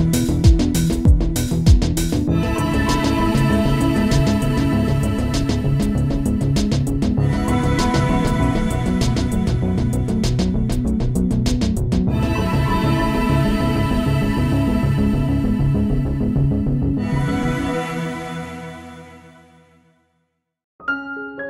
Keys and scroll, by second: 13.3 space.